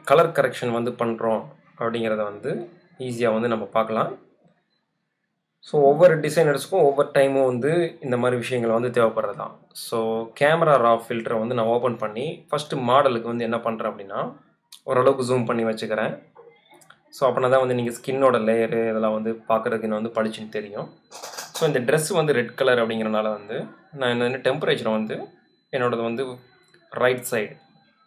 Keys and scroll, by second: 15.8 space, 17.4 space, 20.2 super+-, 21.8 space.